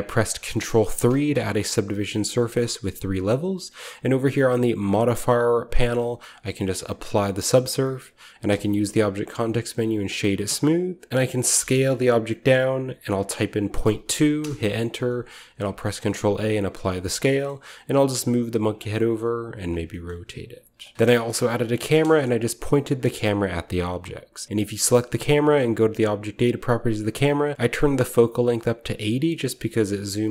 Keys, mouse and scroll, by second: 1.0 ctrl+3, 2.5 click, 4.9 click, 6.3 click, 7.1 click, 8.4 w, 10.0-11.1 drag, 11.4 s, 13.6 ., 13.7 2, 14.3 Return, 15.0 scroll up 1, 15.1 typing, 15.6 ctrl+a, 16.4 click, 16.8-17.6 shift+middle drag, 17.6-19.1 scroll down 2, 17.6 r, 17.9 g, 19.1-22.0 drag, 19.1 typing, 19.5 middle click, 20.0-20.7 middle drag, 20.5-22.0 typing, 20.7 scroll down 1, 21.0-23.2 right drag, 22.9-26.1 shift+middle drag, 24.6-25.6 drag, 26.0-27.3 drag, 27.5-29.2 shift+middle drag, 29.4 shift+middle click, 29.6-30.3 shift+drag, 30.2-30.3 shift+right drag.